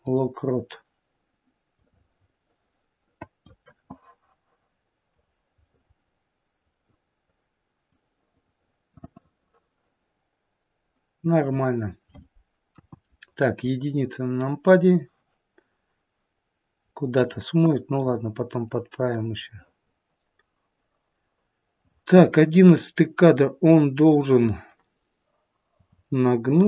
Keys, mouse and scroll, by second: 1.8 click, 5.2 click, 5.6 middle click, 7.9 click, 12.7 KP_1, 18.0-18.9 scroll up 4, 18.9 scroll up 2, 19.0 middle click, 19.5 middle click, 21.7 click, 22.3 middle click, 24.1 click, 25.7 r.